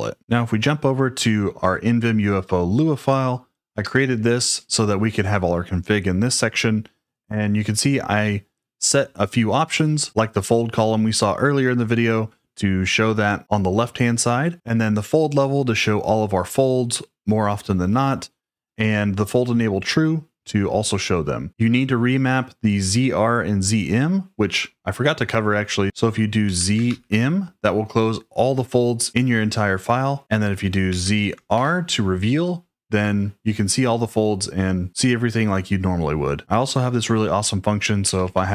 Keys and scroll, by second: 26.4 z, 26.8 shift+m, 30.9 z, 31.5 shift+r, 37.8-38.5 typing.